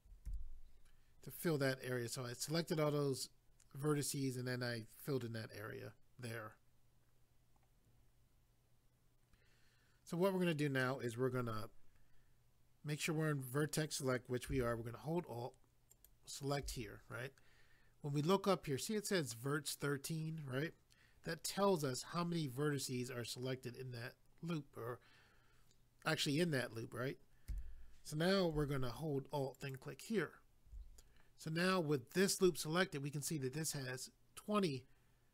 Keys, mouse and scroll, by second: 15.9 alt+click, 29.6 alt+click.